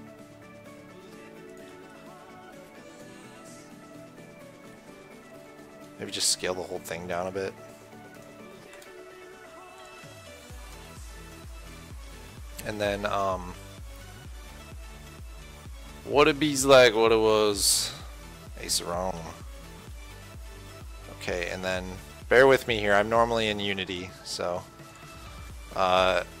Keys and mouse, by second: 2.5 middle click, 3.1 middle click, 6.3 s, 8.9 s, 19.7 KP_1, 20.3 KP_3, 22.2 a, 24.4 a, 25.2-26.4 drag.